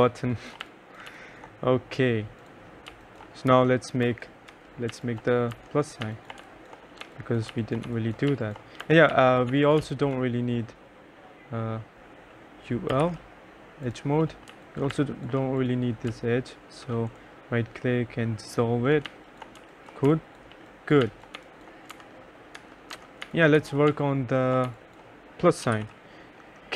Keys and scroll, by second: 0.1 2, 0.7 3, 1.2 1, 3.0 2, 3.6 F4, 4.1 F2, 4.6 F3, 5.0 2, 5.6 F4, 6.1-10.4 typing, 8.9 F1, 12.7-15.0 typing, 18.9-21.5 typing, 22.0 F4, 22.1 F3, 23.0 F4, 23.0-26.5 typing.